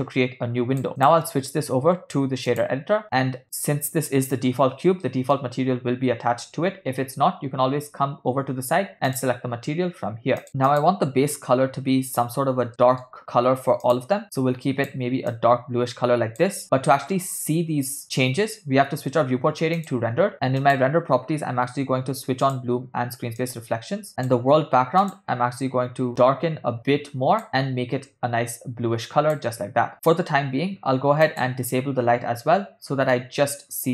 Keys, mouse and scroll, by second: 1.0-2.8 drag, 3.1 middle click, 5.2 middle click, 7.0-7.5 scroll down 1, 7.5-8.1 scroll down 3, 8.1 scroll down 3, 9.2 click, 10.7 click, 12.7 ctrl+middle click, 13.9 click, 20.2 click, 20.7 click, 22.7 click, 23.6 click, 24.3 click, 25.1 click, 29.9 click, 31.5 click, 32.6 middle click.